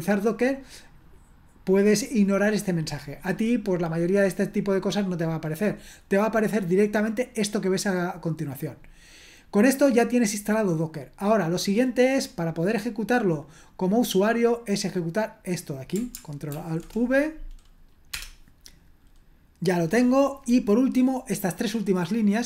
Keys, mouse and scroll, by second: 11.0-12.2 scroll down 1, 12.2 click, 12.5 click, 12.7 click, 13.9 click, 15.4 click, 16.6 ctrl+alt+v, 18.1 Return, 21.0-22.0 scroll down 2, 22.0-22.4 drag.